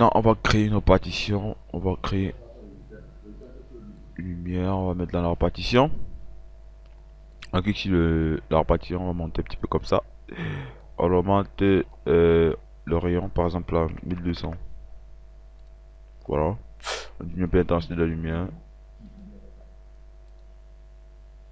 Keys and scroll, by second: 13.6 KP_1, 13.8 KP_2, 14.2 KP_0.